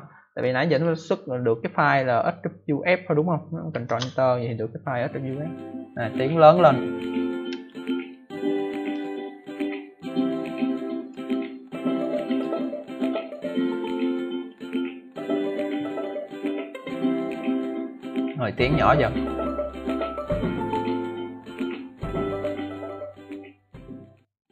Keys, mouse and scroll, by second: 0.6 click, 1.8 click, 3.0 click, 3.8 ctrl+Return, 10.9 click, 12.2 click, 13.5 click, 14.3 click.